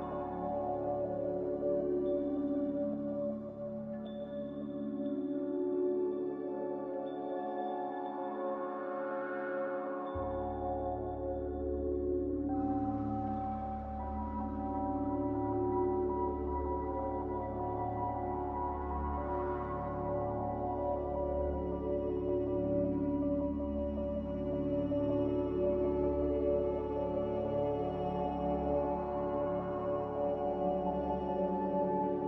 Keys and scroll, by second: 3.2 a, 5.6 ctrl+c, 5.9 ctrl+v.